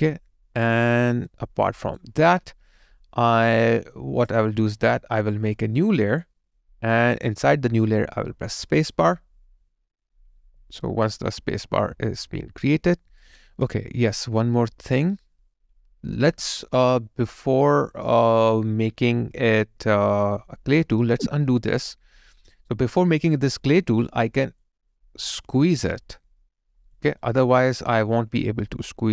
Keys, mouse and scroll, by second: 1.3 alt+right click, 8.6 space, 10.7 alt+right click, 11.4 alt+click, 27.2 alt+right click, 27.6 alt+click.